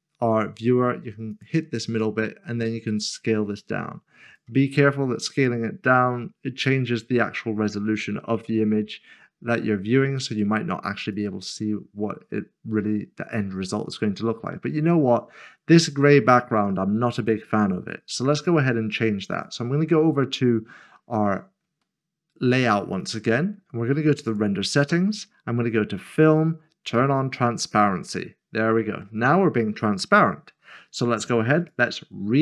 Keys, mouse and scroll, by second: 1.9 click, 7.7 middle click, 11.1 middle click, 19.3 click, 21.0 scroll up 1, 24.2 click, 26.4 scroll down 1, 28.0 click, 31.7 click.